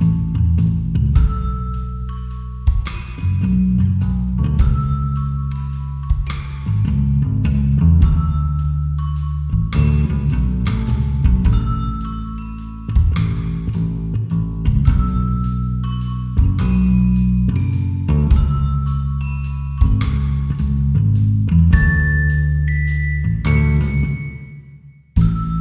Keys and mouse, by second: 3.1 click, 5.9-7.0 drag, 8.1 shift+click, 9.8 ctrl+j, 10.5 click, 15.5 shift+a, 18.2 Tab, 18.8 KP_Divide, 19.9 1, 21.1 click, 22.3 Delete, 24.0 KP_7, 25.1 a.